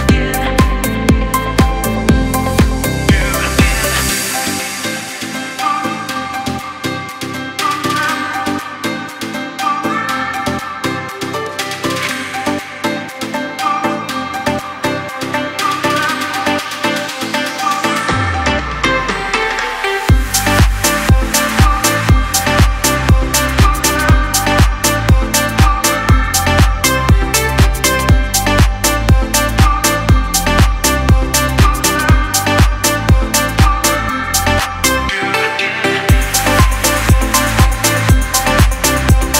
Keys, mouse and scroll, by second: 2.0 typing, 2.6-4.7 scroll up 1, 4.7-5.0 scroll down 1, 5.9 click, 6.2 alt+scroll up 1, 6.9 click, 7.3 alt+scroll up 1, 8.1 click, 8.9-12.0 drag, 13.1 Up, 16.5 click, 16.5 typing, 16.9-18.5 scroll down 1, 18.5 click, 19.1-20.2 scroll down 1, 20.8 click, 21.3-22.2 alt+scroll down 1, 22.4 click, 22.6 space, 22.8 click, 23.2 space, 23.5 alt+scroll down 1, 25.8 click, 26.3 space, 26.4 click, 26.8 space, 28.2 click, 28.5 space, 28.6 click, 29.0 space, 29.4 click, 30.3 space, 30.5 click, 30.8 space, 32.0 click, 34.8 click, 35.0 alt+scroll up 1, 36.6 click.